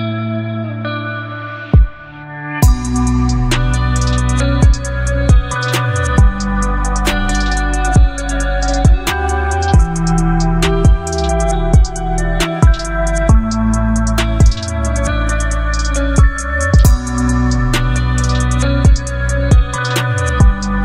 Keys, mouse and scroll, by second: 1.1 ctrl+t, 2.9-12.1 drag, 12.1 Return, 14.9 click, 16.6 ctrl+j, 18.6 click, 19.6 right click.